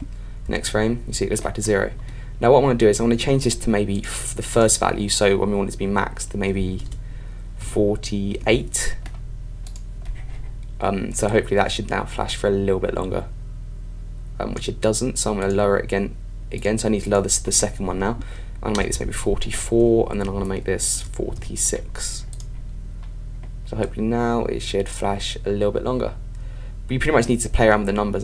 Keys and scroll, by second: 0.5 super+Right, 5.8 Right, 19.9 Left.